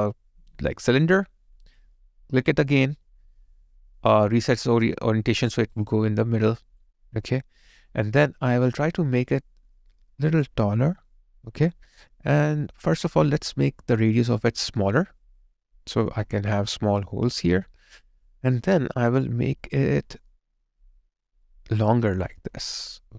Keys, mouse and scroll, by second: 5.8 alt+right click, 21.9 alt+click.